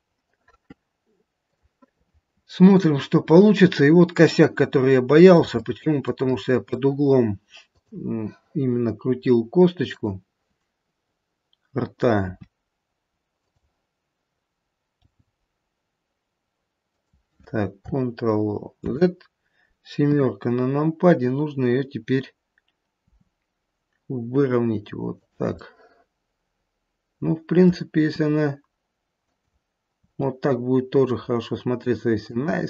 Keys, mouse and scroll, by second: 1.5 click, 3.3-4.4 scroll up 2, 4.4 middle click, 4.4-5.2 scroll up 1, 5.6 shift+middle click, 6.3 middle click, 7.7 click, 9.8 click, 12.2 r, 15.0 g, 18.9 ctrl+z, 20.0 KP_7, 23.0 r, 25.5 middle click, 26.1 middle click, 27.6 middle click, 27.9 r, 29.9 r.